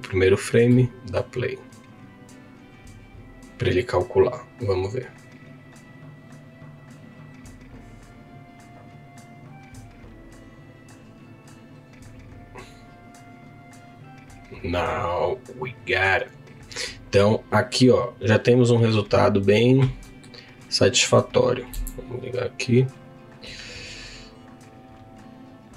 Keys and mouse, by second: 0.7-5.5 drag, 17.2 click, 20.1 middle click, 21.7 z, 23.0-25.7 drag.